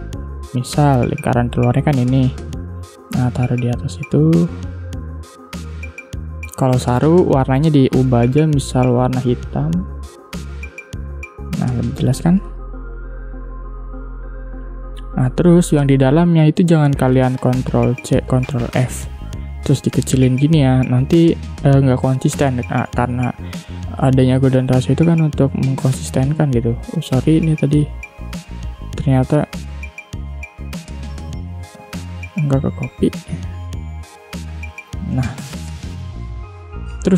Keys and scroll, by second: 6.2 i, 10.4 v, 17.1 ctrl+c, 17.6 ctrl+f, 21.2 ctrl+z, 22.8 space, 34.6 v, 35.3 space.